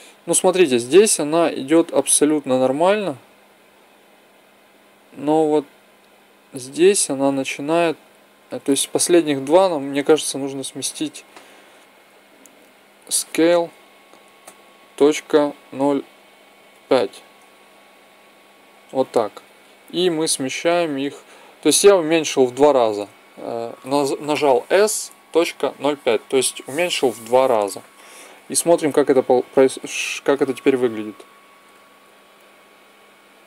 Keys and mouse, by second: 0.3-2.0 drag, 9.4-12.0 drag, 13.0 s, 20.3 g, 28.8-30.7 drag, 31.4 alt+a.